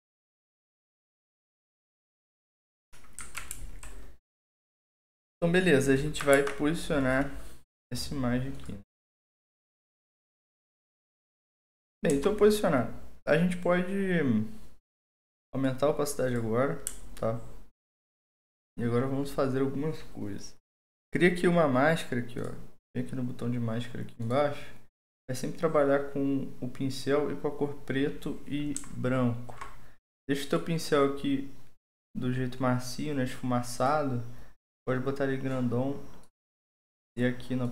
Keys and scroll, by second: 3.5 alt+2, 6.3 ctrl+t, 12.1 Return, 28.8-29.6 typing.